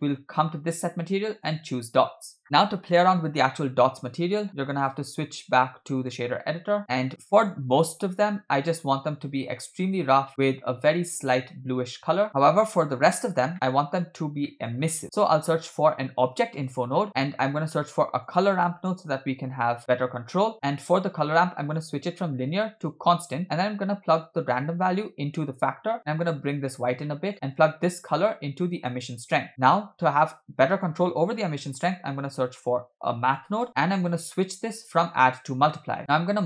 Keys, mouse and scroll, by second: 0.0-1.7 drag, 2.4-3.9 scroll down 3, 4.8-6.1 drag, 6.8 scroll down 6, 7.1-9.2 scroll up 4, 7.3 middle click, 9.2 scroll up 2, 9.2-10.1 drag, 10.3 middle click, 10.4-11.0 scroll up 1, 11.0 scroll up 1, 11.1 click, 13.5 middle click, 13.9-14.5 scroll down 5, 14.5 middle click, 14.8 scroll up 1, 15.0 shift+a, 17.2 shift+a, 20.5 middle click, 20.5-21.6 scroll up 3, 21.6 scroll up 1, 21.7-23.0 drag, 24.2-25.6 drag, 26.1-26.8 drag, 27.0 middle click, 27.5-29.1 drag, 29.5 click, 29.8 shift+a, 35.1 click, 36.0 middle click.